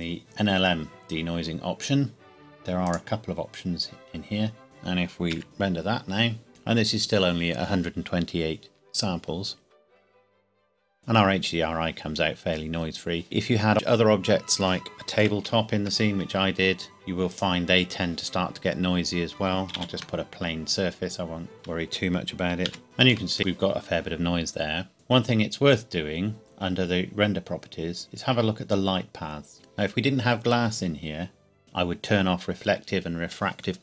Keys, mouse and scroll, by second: 2.8 click, 5.2 click, 5.4 F12, 10.6 scroll down 1, 10.8 scroll up 1, 11.1 scroll down 1, 15.2 Escape, 17.2 click, 19.7 shift+a, 22.6 s, 22.8 shift+middle click, 23.4 scroll up 1, 25.1 click, 27.9-29.4 scroll down 1.